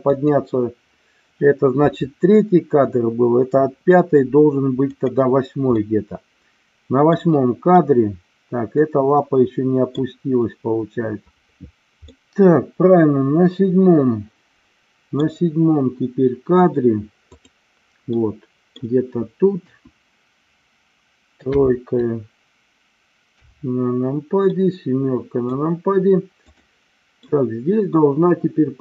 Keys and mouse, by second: 0.1 click, 4.9 click, 5.7-7.1 middle drag, 7.7-9.8 middle drag, 12.1-15.2 middle drag, 17.3 click, 18.2 middle click, 19.5 KP_1, 21.4 KP_7, 23.3 KP_3, 24.4-25.5 middle drag, 26.4 drag, 27.3-28.8 middle drag.